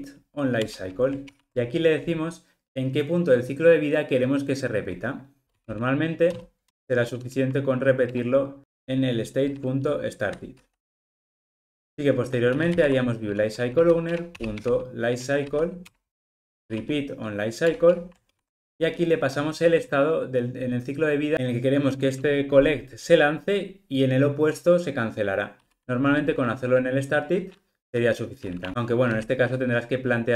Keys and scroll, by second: 1.3 super+p, 11.7 super+z, 18.2 super+p.